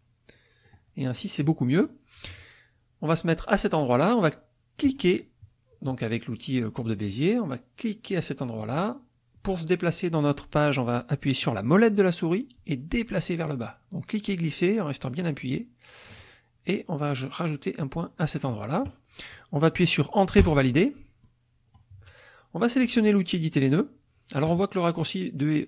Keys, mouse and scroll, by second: 0.6 click, 1.1 click, 1.4 middle click, 4.8 click, 8.6 click, 11.8 click, 12.7 middle click, 13.3-16.3 drag, 18.5 click, 20.4 Return, 21.2 middle click.